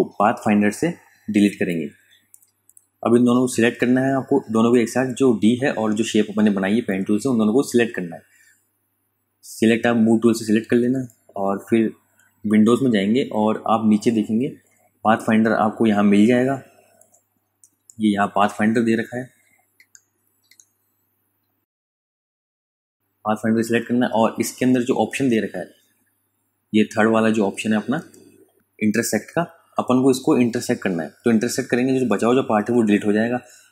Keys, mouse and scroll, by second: 3.0 v, 5.0 click, 11.6 scroll up 1, 12.8 click, 16.6 click, 22.0 super+Num_Lock, 22.2 KP_Add, 24.0 super+KP_Subtract, 30.3 click.